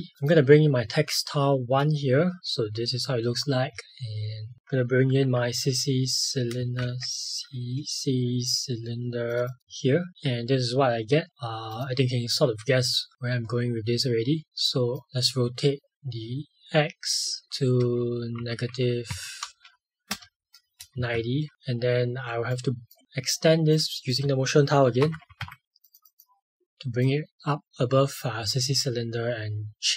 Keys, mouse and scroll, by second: 0.1 click, 4.5 click, 5.0 c, 6.5 space, 6.8 c, 9.2 click, 11.7 click, 14.9 click, 17.4 click, 17.8 Down, 18.3 Up, 19.0 Right, 20.0 BackSpace, 20.6 KP_0, 20.9 Return, 21.5 click, 24.5-25.9 typing, 25.8 click, 29.7 click.